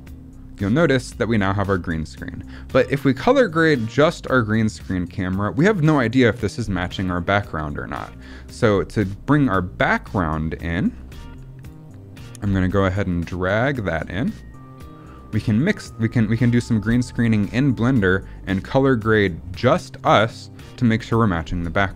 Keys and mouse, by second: 9.3-9.9 drag, 14.2-15.1 drag, 17.7-18.1 drag.